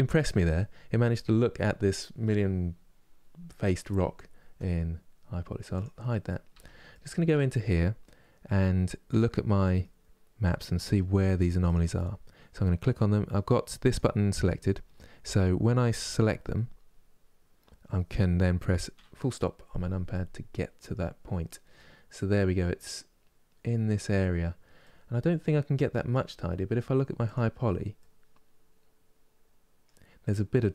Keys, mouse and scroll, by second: 0.2-3.7 middle drag, 5.4 click, 6.2 Tab, 6.6-11.3 middle drag, 11.3 click, 18.6 KP_Decimal, 19.3 scroll down 2, 19.8-20.9 middle drag, 20.9-21.8 scroll down 4, 21.8-23.8 middle drag, 23.8-24.4 scroll down 3, 24.4-26.9 middle drag, 26.9 click, 27.6-30.7 middle drag.